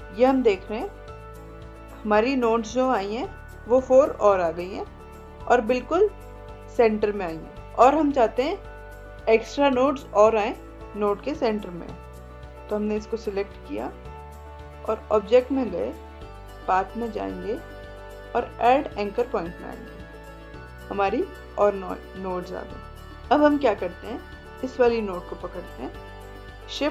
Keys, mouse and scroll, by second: 10.8-12.8 drag, 12.8 ctrl+a, 15.1 click, 19.2-23.7 drag, 24.0-26.9 drag.